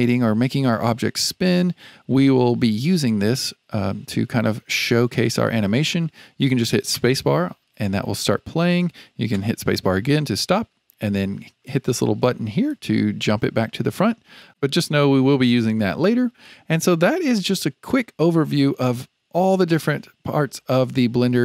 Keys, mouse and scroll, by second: 6.9 space, 9.3 space, 12.8-14.5 drag.